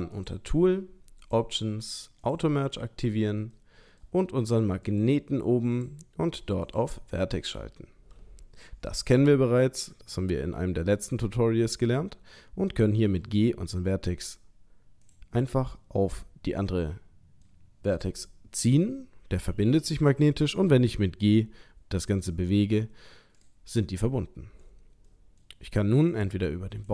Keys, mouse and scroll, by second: 0.1 click, 1.2 click, 3.5 middle click, 4.9 click, 5.7 click, 13.1 g, 15.7 middle click, 20.4 g, 23.8 middle click, 25.1 middle click, 26.1 click.